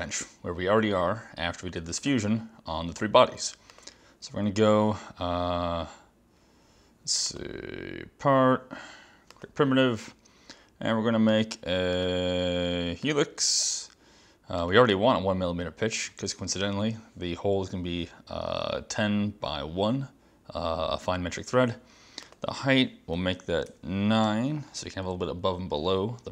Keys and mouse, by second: 3.8 click, 7.4 click, 9.4 click, 11.4 click, 12.1 click, 13.1 click, 14.7 click, 22.3 click, 23.2 Left, 23.7 BackSpace, 24.3 9.